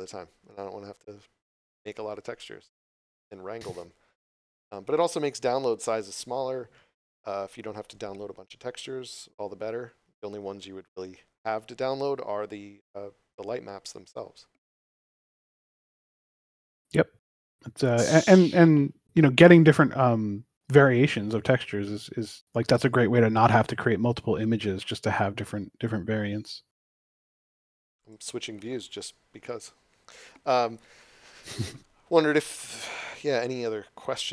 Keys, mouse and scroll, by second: 19.4 click, 23.2 click, 28.0 click.